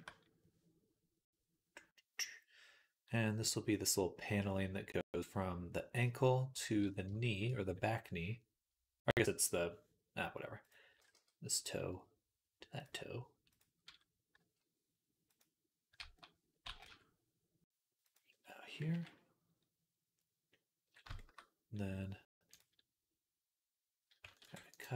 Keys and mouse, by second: 11.0 g, 14.2 g, 15.8 a, 16.5 g, 18.7 KP_3, 24.3 ctrl+r.